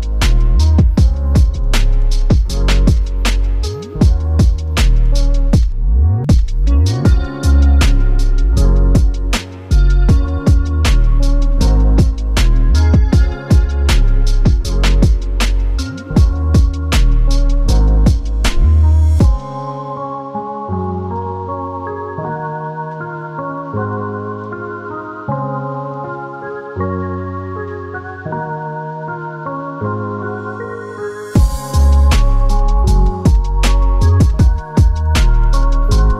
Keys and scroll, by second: 13.3-14.9 typing, 14.3 Tab, 15.3 Tab, 22.5 super+space.